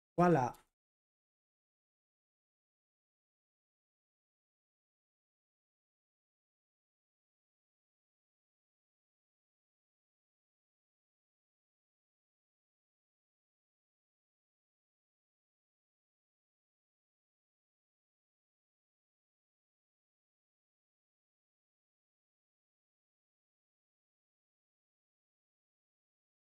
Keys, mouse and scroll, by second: 0.0-2.4 typing, 3.5-8.8 typing, 10.3-13.6 typing, 14.8 typing, 16.1 typing, 16.3 Escape, 18.9-24.8 typing, 19.4 Escape, 25.1 super+h, 25.6 ctrl+p, 25.9 Return.